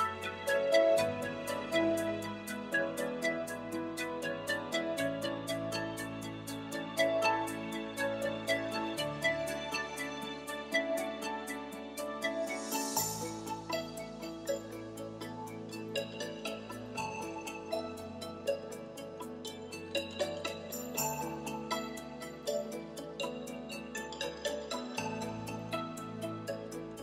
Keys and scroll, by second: 23.9-24.9 typing.